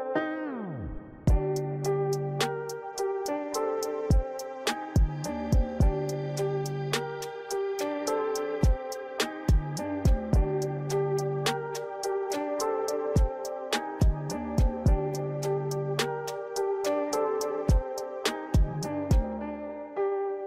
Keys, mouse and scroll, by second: 0.0 Tab, 0.6 KP_1, 1.1-1.4 scroll down 3, 1.4-1.8 scroll up 3, 2.2 r, 5.3 ctrl+z, 5.9 r, 8.8 KP_3, 9.9 r, 10.9 KP_9, 12.6 r, 14.9 right click, 17.8 right click, 18.9 right click, 19.7 right click.